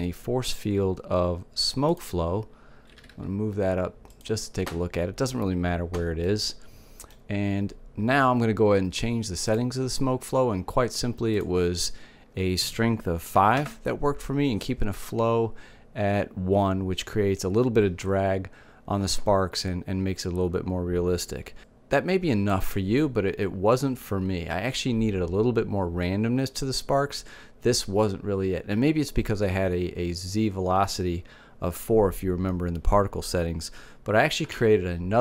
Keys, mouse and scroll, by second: 2.6 g, 3.9-5.7 drag, 5.9 middle click, 7.8-9.1 middle drag, 9.1-12.9 drag, 21.6-23.0 drag, 34.2 shift+a.